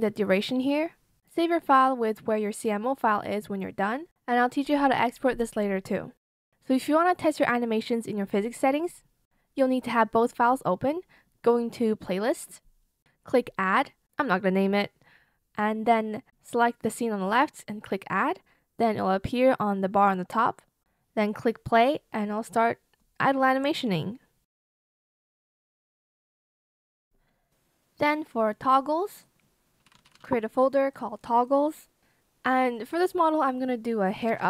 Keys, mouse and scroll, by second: 29.5-31.1 typing, 33.9-34.4 typing.